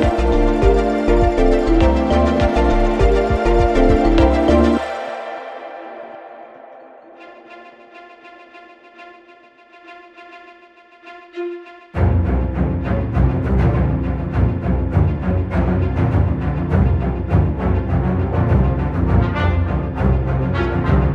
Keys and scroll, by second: 1.2 space, 4.9 3, 5.0 Return, 7.5 6, 7.8 Return.